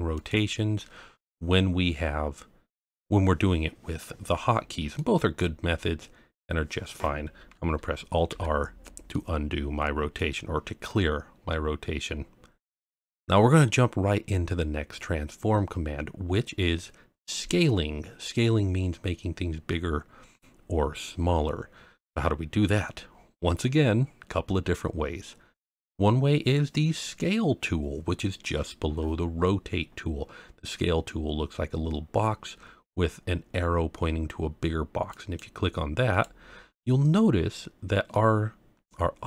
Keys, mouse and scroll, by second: 0.1 click, 0.8-3.0 middle drag, 5.0-5.4 middle drag, 5.7-6.5 scroll down 1, 6.5-7.4 scroll down 1, 7.4 scroll up 1, 8.3 alt+r, 9.1-10.2 middle drag, 17.2-17.5 scroll up 1, 18.5-19.4 scroll down 1, 35.1 click, 36.2 click, 38.1-38.8 middle drag.